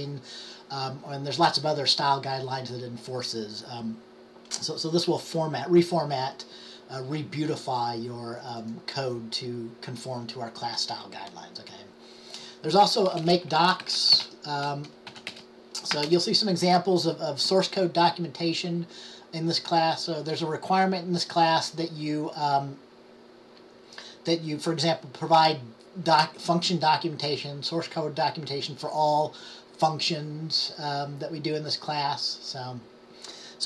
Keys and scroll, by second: 14.0 typing, 15.1-16.1 typing.